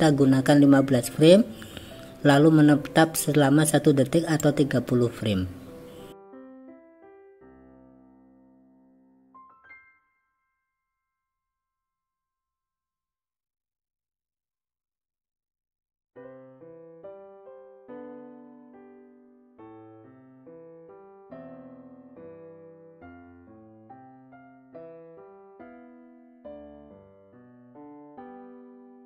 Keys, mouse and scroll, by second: 4.5-6.6 drag, 7.5-7.9 drag, 8.4 shift+d, 11.1 click, 13.0 click, 13.5-14.8 drag, 15.2 i, 18.4 click, 18.8 drag, 19.1 click, 19.6 shift+d, 20.5 click, 20.9 click, 21.8-23.0 drag, 23.2 drag, 23.6 Delete, 23.9 click, 24.6 click, 26.8 ctrl+z.